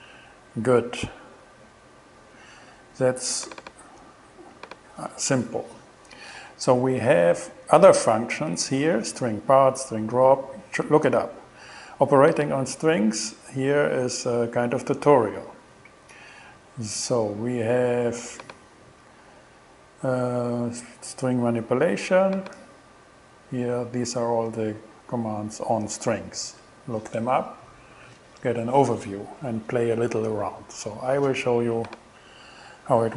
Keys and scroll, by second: 0.5 shift+Return.